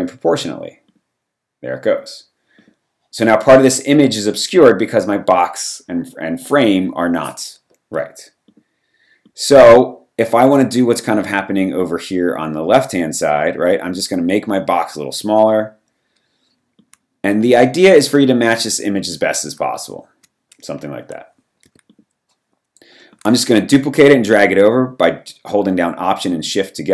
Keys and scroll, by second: 7.9 v, 21.7 v.